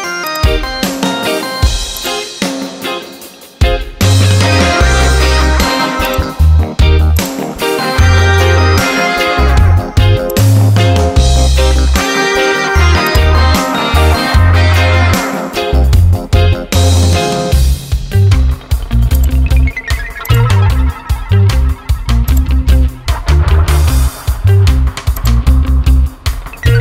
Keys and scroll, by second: 14.3 Return, 17.3 ctrl+j, 21.0 ctrl+t.